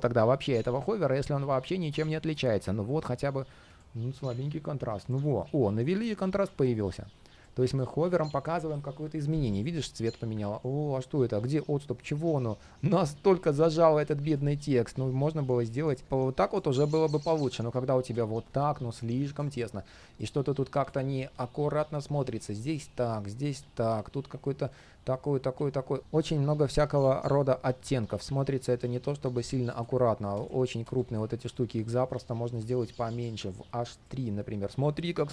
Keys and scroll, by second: 17.3 super+z.